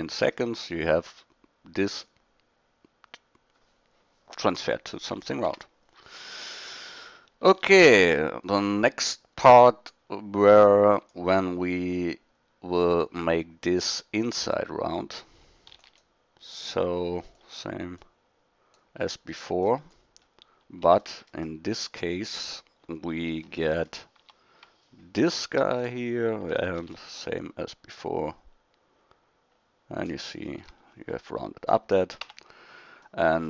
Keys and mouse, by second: 6.4 KP_1, 15.8 shift+d, 19.1-21.0 middle drag, 21.1 middle click, 21.2-21.5 middle drag, 22.5 middle click, 22.8 middle click, 24.2 Tab, 26.8 ctrl+b, 30.6 a, 31.0 middle click, 32.2 Tab.